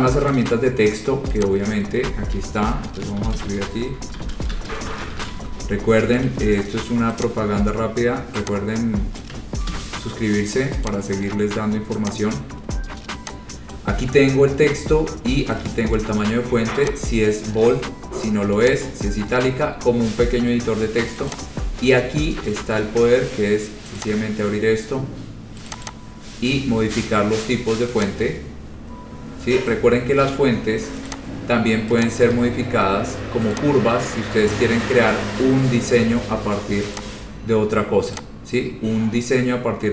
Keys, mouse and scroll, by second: 0.5 click, 0.9-1.4 scroll, 1.6 click, 3.0-6.0 typing, 6.4 ctrl+a, 7.4 click, 7.5 scroll, 9.4 click, 9.8 d, 11.0 click, 11.3 scroll, 12.6 click, 13.9 click, 17.0 click, 18.8 click, 21.5 click, 24.2 click, 25.8 click, 26.0 click, 26.6 scroll down 4, 28.2 click, 28.8-30.4 scroll, 31.2 click, 32.2 click, 32.5 ctrl+a, 33.7 click, 37.2 click, 38.4 click, 39.0-39.8 scroll up 2, 39.8-39.9 scroll.